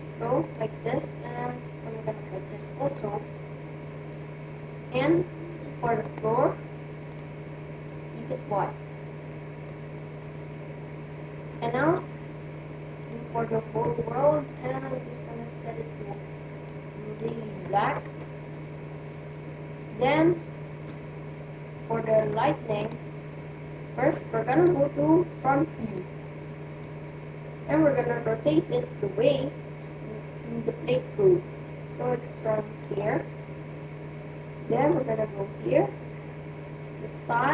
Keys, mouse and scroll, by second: 3.9-5.9 middle drag, 5.9-7.7 right drag, 6.8-9.0 drag, 9.6-11.6 middle drag, 12.9-16.3 drag, 17.2-18.8 drag, 18.0-19.5 middle drag, 19.9-21.8 middle drag, 22.2 click, 24.4 right click, 25.7 KP_1, 27.6 r, 34.8-36.5 drag.